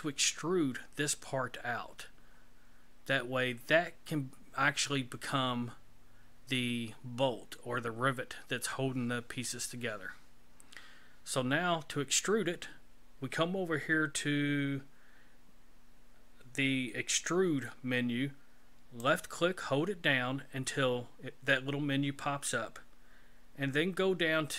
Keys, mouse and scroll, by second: 19.0 click.